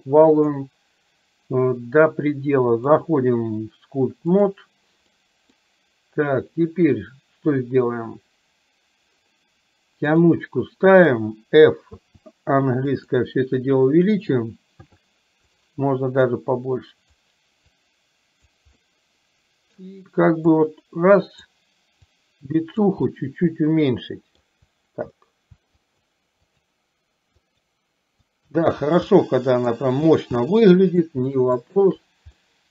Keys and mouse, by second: 2.9-4.6 drag, 5.3 middle click, 10.3 click, 12.1 f, 14.9 f, 16.4 click, 17.8 click, 19.0 middle click, 20.6 click, 22.3 click, 23.3-24.5 middle drag, 25.9 shift+click, 26.6 shift+click, 27.5 shift+click, 28.4 shift+click, 29.3 middle click, 30.6 middle click, 31.8 shift+click, 32.6 middle click.